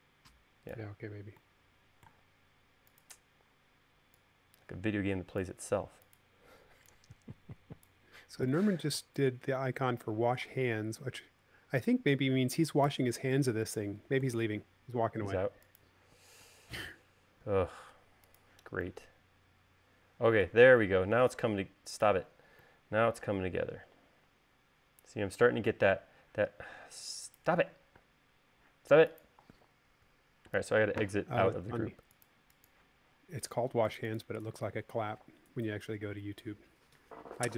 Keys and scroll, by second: 13.1 u, 28.2 space, 30.1 Escape, 30.3 Escape.